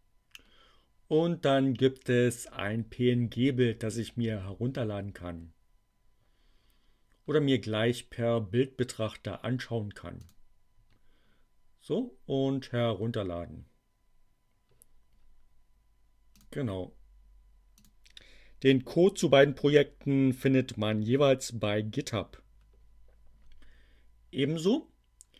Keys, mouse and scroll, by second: 10.1 click, 16.2 click, 17.7 click, 24.4-25.3 drag.